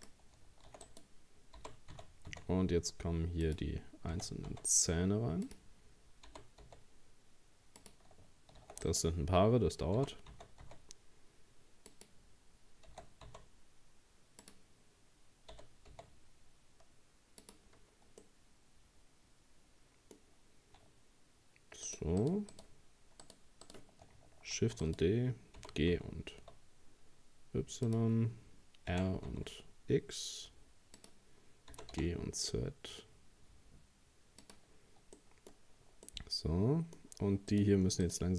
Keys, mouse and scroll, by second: 0.7 shift+d, 1.6 g, 4.1 r, 6.3 g, 8.6 shift+d, 10.0 g, 12.9 r, 15.5 g, 17.8-18.1 scroll down 1, 18.2-21.3 middle drag, 21.9 shift+right click, 22.2 shift+right click, 22.5 shift+right click, 23.2 shift+right click, 23.6 shift+right click, 24.6 shift+d, 25.6 g, 28.9 r, 31.7 g, 35.2 middle click, 35.6-36.1 scroll up 2, 36.1-37.5 middle drag, 37.5 right click, 38.0 shift+right click.